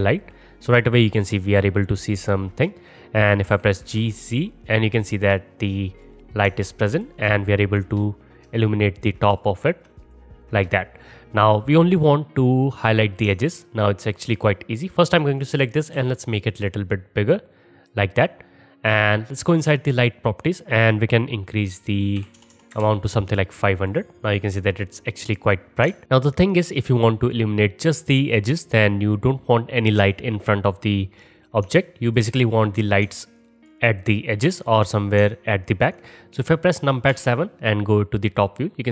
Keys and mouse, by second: 0.0 middle click, 0.1-6.5 middle drag, 3.6 g, 6.5 alt+click, 6.6 middle click, 6.6-7.3 alt+drag, 7.3-8.7 middle drag, 8.5-9.8 space, 8.7-10.1 drag, 10.1-11.9 middle drag, 12.9 click, 15.4 click, 16.0 s, 19.5 click, 20.4-23.9 drag, 22.5 KP_0, 26.7-33.6 middle drag, 33.6-35.8 alt+drag, 35.8-38.9 alt+middle drag, 37.1 KP_7.